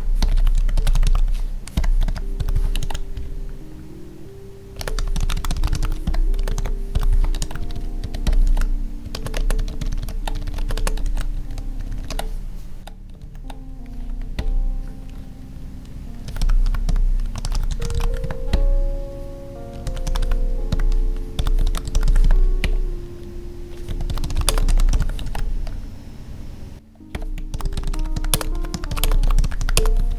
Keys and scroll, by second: 2.8 ctrl+s, 3.1 Right, 4.7 space, 6.3 space, 7.4 ctrl+s, 7.6 Left, 8.4 ctrl+s, 9.0 Left, 9.1 space, 9.2 Right, 9.3 space, 9.5 Left, 10.3 Left, 10.6 space, 10.6 Right, 10.7 space, 11.0 ctrl+s, 11.5 ctrl+Down, 12.8 ctrl+z, 18.2 Tab, 22.2 Tab, 24.4 space, 25.2 ctrl+s, 28.3 space, 29.0 space, 29.7 space.